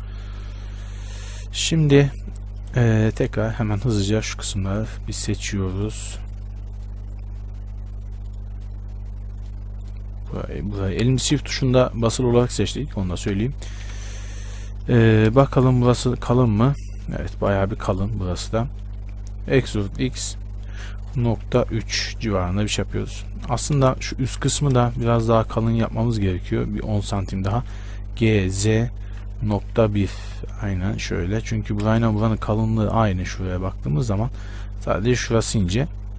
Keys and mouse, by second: 3.3-14.0 right drag, 14.0 KP_1, 15.5 shift+space, 19.6 e, 24.0 shift+space, 24.5 a, 24.7 z, 25.5 b, 28.7 g, 32.1 shift+space.